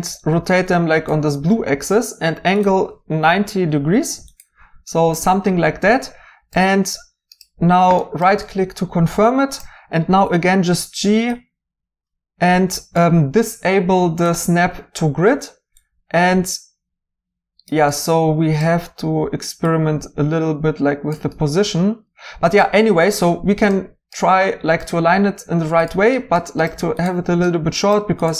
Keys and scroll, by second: 3.3 typing, 5.6-6.8 typing, 8.5-10.1 typing.